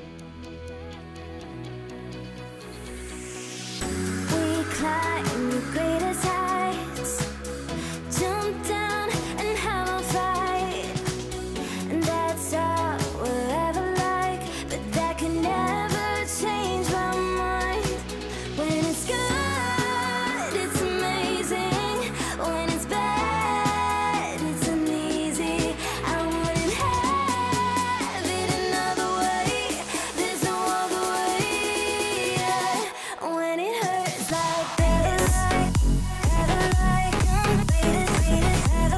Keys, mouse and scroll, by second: 2.3 click, 5.7 click, 7.0 ctrl+z, 8.5 click, 11.2 click, 13.3 ctrl+z, 14.4 click, 17.7 Delete, 18.6-21.7 drag, 25.0 click, 26.0 ctrl+z, 28.0-29.7 drag.